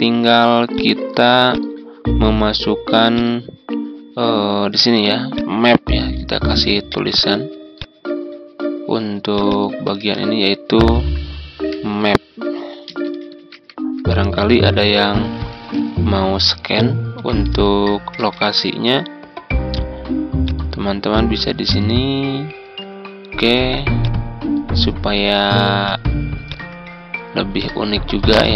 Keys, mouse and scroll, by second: 4.6 ctrl+d, 5.3 click, 6.3 ctrl+z, 7.1 click, 9.9 ctrl+a, 10.8-12.7 typing, 14.8-16.0 typing, 17.1-18.9 typing, 20.4-23.3 drag, 23.5 z, 24.0-25.3 drag, 26.4 shift+click, 28.3 click.